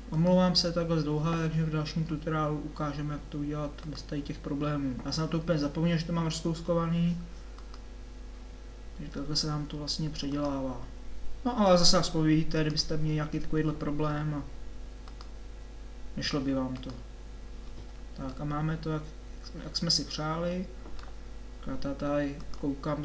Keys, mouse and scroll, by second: 1.1 click, 11.7-13.7 drag, 14.7 click, 18.3-20.3 middle drag.